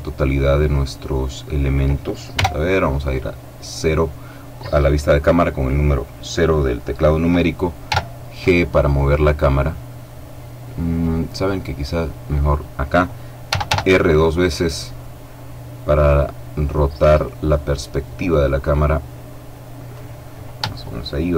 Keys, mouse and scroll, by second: 2.2 KP_0, 7.7 g, 12.3 click, 13.3 r, 19.7 click.